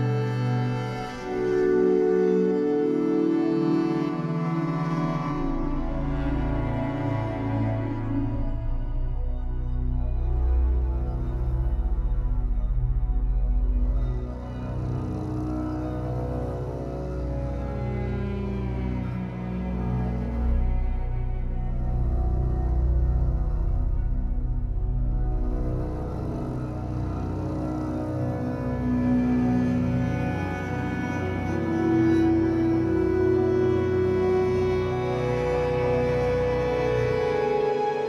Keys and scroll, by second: 5.9 3, 9.0 m, 17.8 m, 27.6 3, 28.2 shift+Caps_Lock, 28.5 shift+Tab, 29.1 Escape, 31.6 3, 33.0 w.